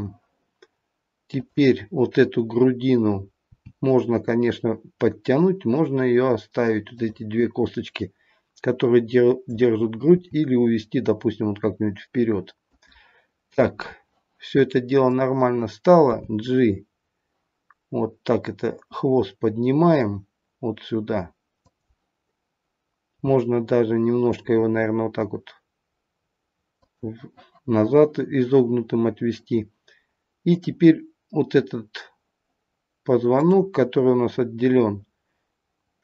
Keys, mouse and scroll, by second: 1.3 click, 3.4 g, 7.3 click, 10.0 g, 15.1 click, 16.3 g, 23.2 g, 30.4 click, 33.3 click.